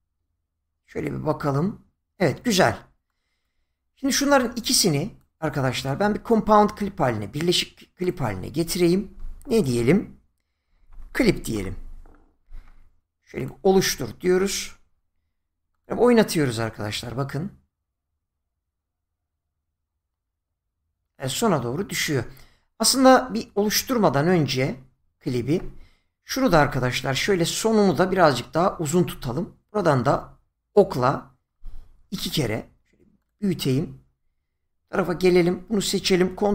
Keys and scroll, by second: 10.7-11.5 typing, 24.5 ctrl+z, 29.0 Left.